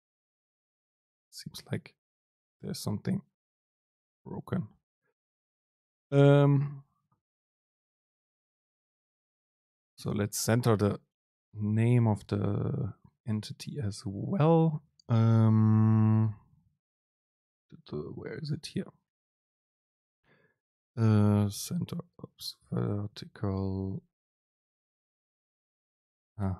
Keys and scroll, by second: 21.1 ctrl+space.